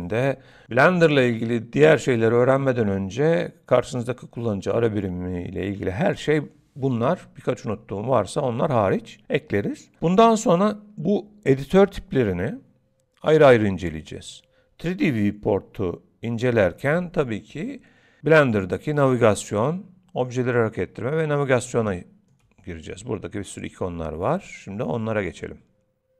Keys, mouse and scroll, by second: 19.0 middle click, 21.0 middle click, 21.9 shift+middle click.